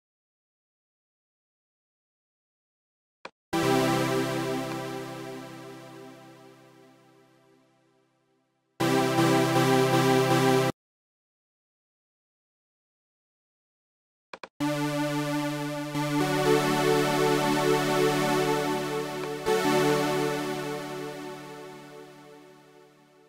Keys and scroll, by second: 0.0 Up, 17.4 Right, 20.1 Left, 20.9 shift+Left.